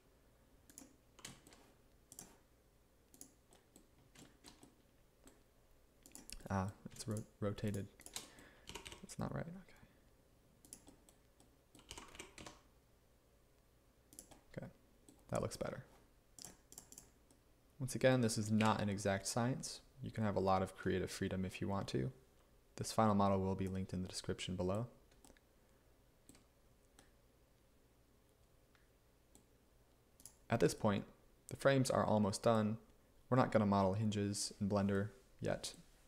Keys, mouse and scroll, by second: 3.8 g, 8.7 g, 8.9 y, 12.0 g, 18.6 1.